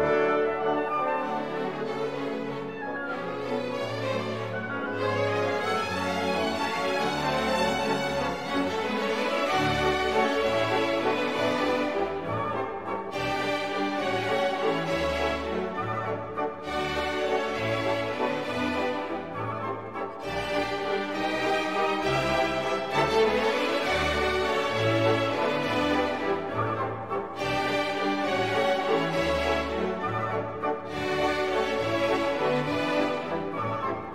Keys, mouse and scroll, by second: 0.9-9.0 drag, 9.5 click, 20.8 scroll up 2, 21.7 scroll up 2, 22.5 scroll down 2, 25.3-27.2 drag, 27.6-29.7 drag, 30.2-31.7 drag, 33.1-34.1 drag.